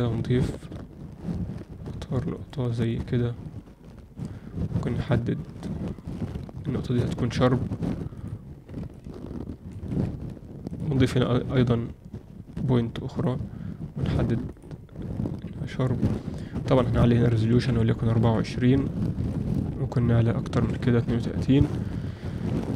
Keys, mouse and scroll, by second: 4.9 click, 8.1 click, 8.9-9.7 ctrl+alt+middle drag, 11.7-14.5 drag, 16.7-22.4 drag.